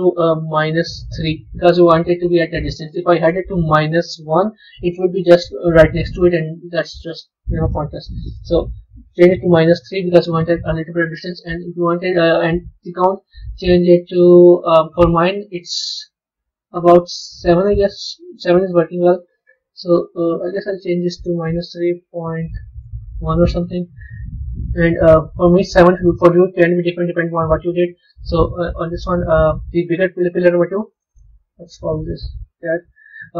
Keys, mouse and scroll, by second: 3.1-6.1 drag, 7.0-10.1 drag, 13.5-23.5 drag, 27.4 click, 29.5 click, 30.8 click, 31.0-32.4 drag, 32.4 BackSpace, 32.5 BackSpace, 32.9 BackSpace.